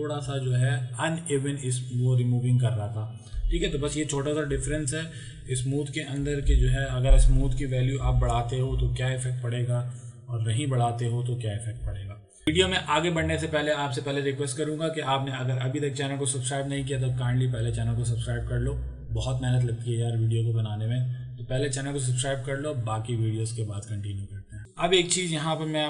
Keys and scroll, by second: 4.2 ctrl+KP_Subtract, 4.6 ctrl+KP_Subtract, 5.2 ctrl+KP_Subtract, 8.3 ctrl+d.